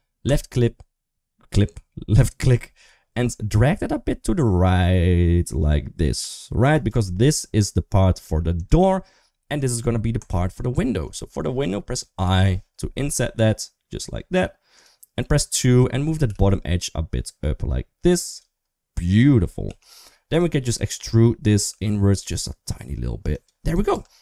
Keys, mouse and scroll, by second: 8.0 3, 8.4 click, 10.1 click, 12.0 i, 15.0 2, 15.3 click, 16.0 g, 19.5 3, 20.5 middle click, 21.4 e, 23.2 typing, 23.7 Tab.